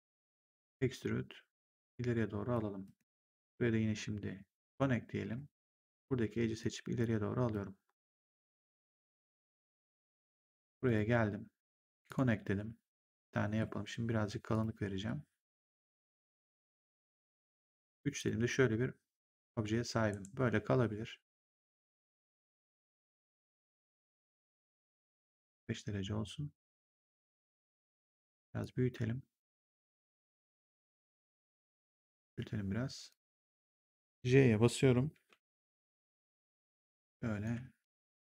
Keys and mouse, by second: 0.5 click, 2.7 right click, 3.3 click, 4.5 click, 5.1 w, 5.7 click, 10.7 click, 11.9 click, 13.1 middle click, 14.4 click, 14.9 middle click, 16.7 w, 17.1 right click, 17.5 3, 18.1 click, 20.0 ctrl+1, 21.7 click, 21.9 w, 22.7 click, 24.2 e, 25.1 click, 27.4 w, 27.8 r, 28.5 click, 32.2 click, 33.2 e, 36.1 click, 37.9 r.